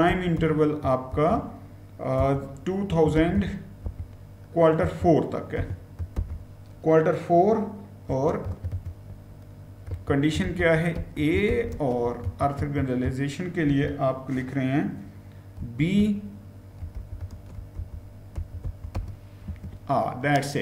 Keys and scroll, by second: 0.0-1.0 typing, 2.1-6.0 typing, 7.9-12.4 typing, 13.5 typing, 15.4-19.3 typing.